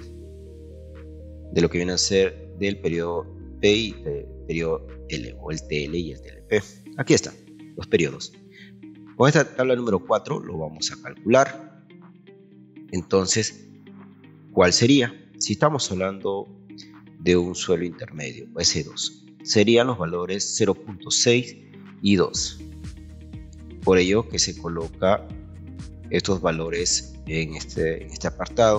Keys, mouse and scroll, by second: 5.2 Escape, 9.9 ctrl+2, 11.3-13.2 ctrl+drag, 14.3 Escape, 16.4 ctrl+2, 18.8 ctrl+click, 28.0 ctrl+2.